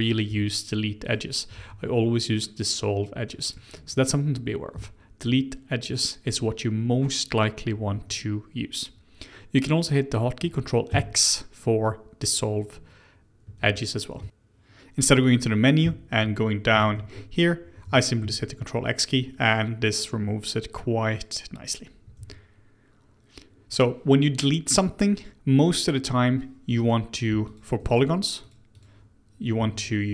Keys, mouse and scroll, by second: 0.2 x, 1.5 ctrl+z, 3.3-4.7 middle drag, 4.7 x, 7.9 ctrl+z, 10.9 ctrl+x, 13.6 ctrl+z, 14.2 ctrl+x, 15.8 x, 16.7 ctrl+z, 16.9 x, 17.8 ctrl+z, 18.2 ctrl+x, 22.1 ctrl+z, 22.5-23.4 scroll down 2, 23.4-24.1 scroll up 1, 26.7 click, 27.2 3, 27.4 click, 27.8 shift+click, 28.4 shift+click, 28.7 shift+click, 29.5 x.